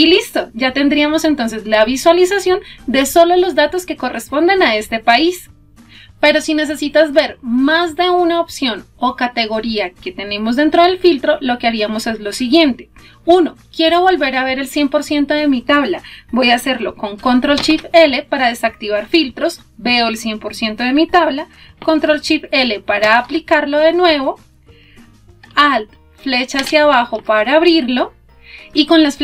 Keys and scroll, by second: 17.0 ctrl+shift+l, 26.2 alt+Down.